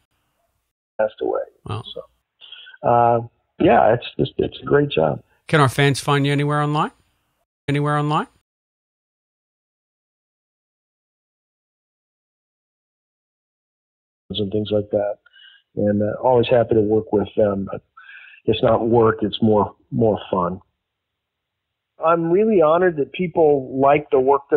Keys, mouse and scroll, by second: 0.0 Delete, 0.6 space, 0.8 click, 2.8 click, 5.8 click, 6.8 click, 7.5 space, 8.3 space, 8.8-10.1 drag, 10.7 click, 11.8 click, 13.2 click, 14.1 click, 14.2 space, 15.0 ctrl+s.